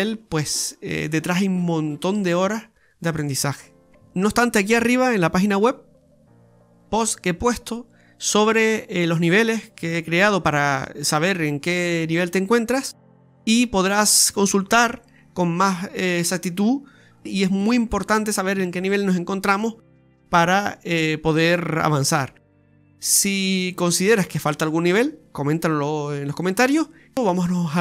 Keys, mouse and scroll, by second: 1.9 click, 2.2 click, 2.2 right click, 2.5 click, 4.0 right click, 4.2 right click, 4.4 alt+shift+right click, 4.5 right click, 4.8 right click, 5.2 click, 5.9 click, 6.1 middle click, 8.0 ctrl+z, 8.1 ctrl+z, 8.3 ctrl+z, 8.4 ctrl+z, 8.6 ctrl+z, 8.8 ctrl+z, 9.0 ctrl+z, 9.2 ctrl+z, 9.4 ctrl+z, 9.5 ctrl+z, 9.7 ctrl+z, 10.0 ctrl+z, 10.2 ctrl+z, 10.4 ctrl+z, 10.8-11.2 scroll up 4, 11.2 middle click, 12.9 middle click, 13.0 middle click, 13.5-13.9 scroll up 2, 13.9 shift+middle click, 14.3 middle click, 14.7 middle click, 15.5 click, 16.0 middle click, 16.7-17.4 scroll down 2, 18.3 click, 19.1 click, 19.9 middle click, 21.9 right click, 22.2 alt+shift+right click, 22.3 right click, 22.6 alt+shift+right click, 23.1 alt+shift+right click, 23.4 scroll down 2, 23.6 middle click, 24.4 click, 25.2 ctrl+z, 25.8 right click, 26.3-26.6 scroll down 4, 26.6 middle click.